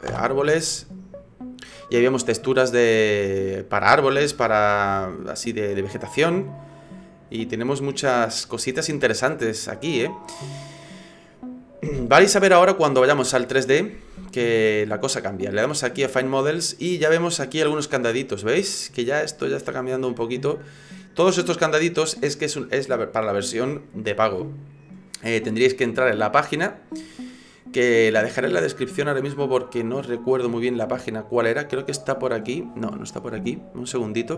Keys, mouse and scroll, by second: 13.9 click.